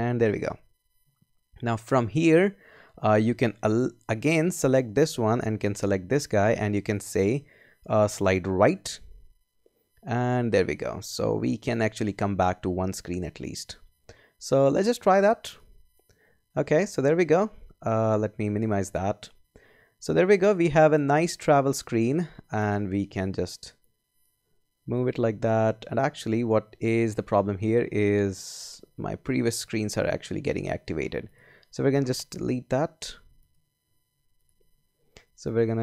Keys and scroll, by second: 32.6 BackSpace.